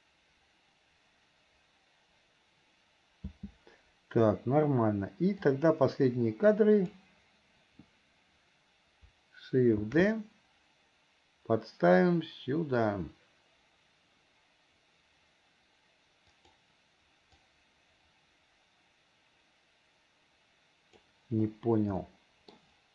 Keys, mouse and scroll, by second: 5.6-7.1 drag, 17.7-21.3 drag, 22.4 middle click.